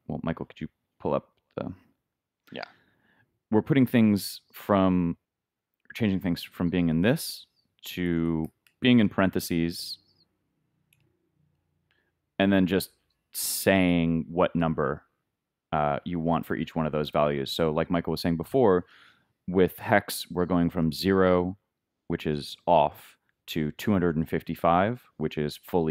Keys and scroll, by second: 1.9 super+Tab, 8.5-9.4 typing, 9.9 shift+Left.